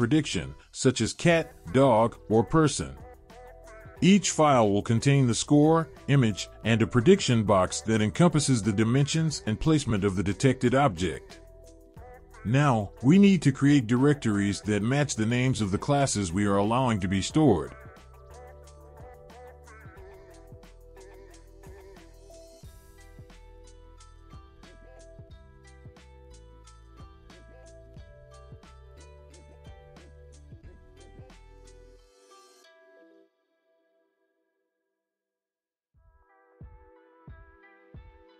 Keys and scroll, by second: 20.4-22.0 typing, 25.6-26.4 typing, 26.6 Return, 30.6-32.1 typing, 32.5 Return, 38.1-38.3 typing.